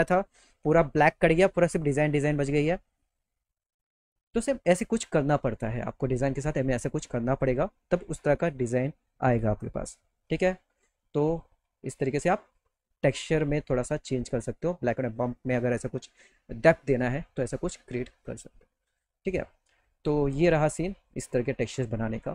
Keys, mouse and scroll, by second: 10.1 middle click, 10.5 middle click, 10.9 middle click, 11.3 middle click.